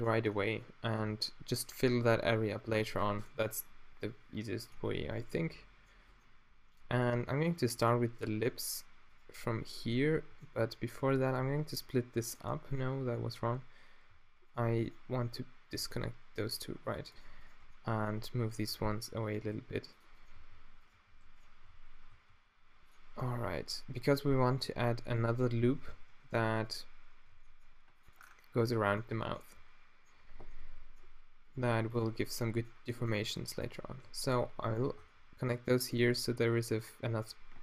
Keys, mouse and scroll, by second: 6.8-7.9 middle drag, 9.1 middle click, 10.3-11.5 middle drag, 11.5 v, 13.2 z, 14.1 v, 14.7 z, 15.7 v, 16.6 super+click, 24.7 g, 24.7 z, 24.7 t, 25.9 shift+space, 27.4 g, 29.8-33.3 drag, 31.6 g, 32.1-33.3 middle drag, 32.4 right click, 34.1 f, 34.7 right click, 35.0 a.